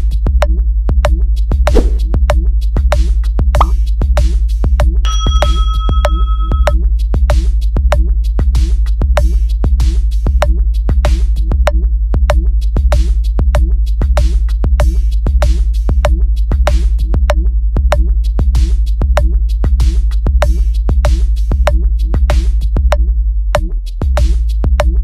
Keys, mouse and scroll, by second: 1.9 click, 2.7 click, 3.3 click, 4.2 click, 6.7 click, 8.7 click, 9.1 click, 10.4 click, 11.6 click, 12.5 click, 15.7 click, 16.3 click, 17.3 click, 18.1 click, 20.0 click, 20.6 click, 24.0 click.